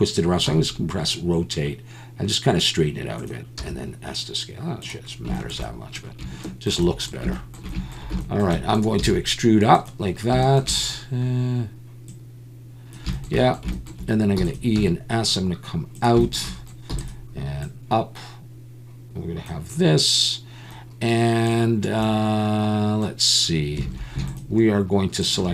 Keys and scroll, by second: 0.5 r, 5.3 shift+s, 9.0 e, 14.4 e, 14.7 s, 16.9 e, 23.8 alt+a.